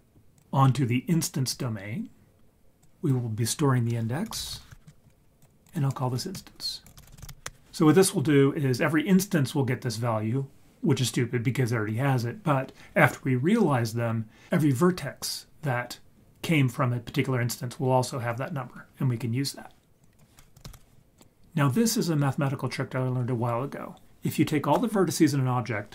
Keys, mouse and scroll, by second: 0.3-1.5 drag, 2.8-4.8 drag, 5.4 click, 5.6 click, 20.0-21.2 drag, 20.7 c, 21.7 click.